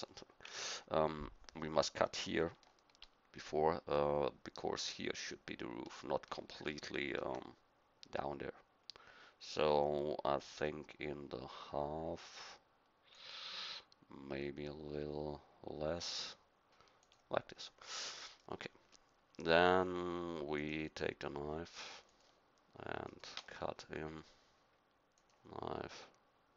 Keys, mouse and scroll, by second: 0.5 KP_1, 7.0 ctrl+r, 18.0 middle click, 20.6-23.4 drag, 25.3-26.5 drag.